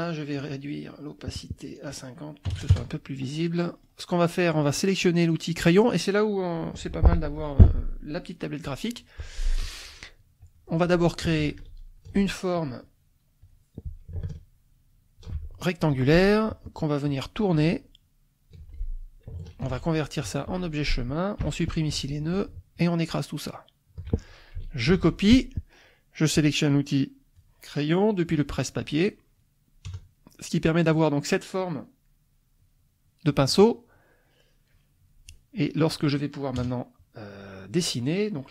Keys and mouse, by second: 0.4 click, 1.8 click, 2.5 KP_5, 2.7 KP_Enter, 3.6 click, 5.6 click, 10.4 click, 11.4 ctrl+shift+click, 13.4 click, 14.2-15.4 ctrl+shift+drag, 16.5 click, 17.0 click, 17.6-18.7 ctrl+drag, 19.7 ctrl+shift+c, 20.2 F2, 20.4 click, 21.4 Delete, 21.9 F1, 22.7-24.1 shift+drag, 24.8 ctrl+c, 26.3 click, 29.0 click, 29.9 KP_Add, 32.2 click, 36.6 KP_Add.